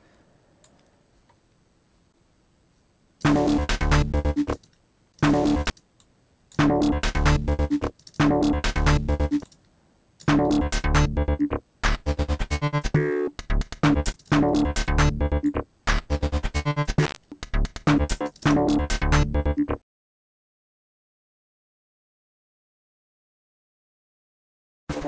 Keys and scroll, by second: 3.2 space, 4.5 space, 8.0 space, 9.4 space, 14.1 space, 18.0 super+z, 18.3 super+space, 20.2 space, 20.3 super+z, 21.5 space, 21.6 alt+super+u, 22.1 alt+shift+super+f, 22.4 space, 22.7 alt+super+u, 22.9 alt+space, 23.3 alt+space, 23.5 b, 23.5 alt+space, 23.7 alt+space, 23.9 b, 24.1 alt+space, 24.1 b, 24.9 super+Escape, 25.0 alt+super+f, 25.0 alt+super+space.